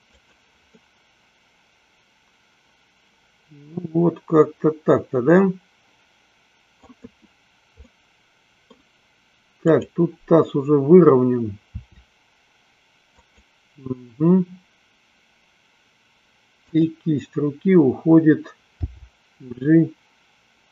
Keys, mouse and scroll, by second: 1.0-7.2 middle drag, 8.0-9.0 middle drag, 9.8-11.2 drag, 12.1 r, 13.6 click, 16.7 click, 19.1 g.